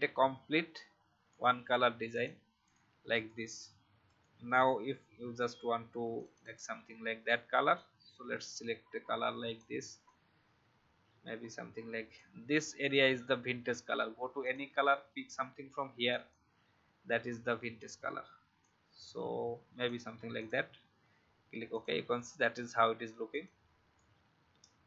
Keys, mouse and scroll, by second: 21.4 v, 21.7-24.8 drag.